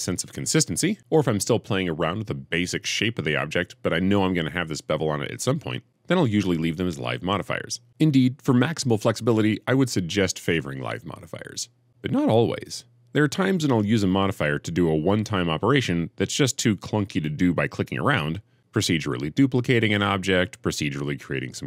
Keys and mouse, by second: 6.4 click, 8.8 click, 10.4-13.0 drag, 13.3 shift+click, 14.9 click, 15.1 click, 15.5 click, 16.3-16.8 shift+middle drag, 20.5 Tab, 20.8-21.6 typing.